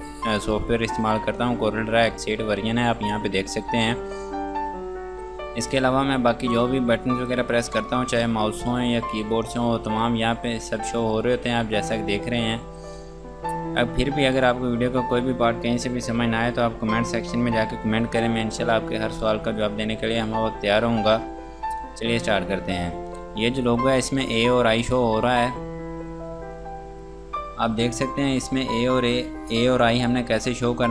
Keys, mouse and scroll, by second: 5.6 click, 8.4 click.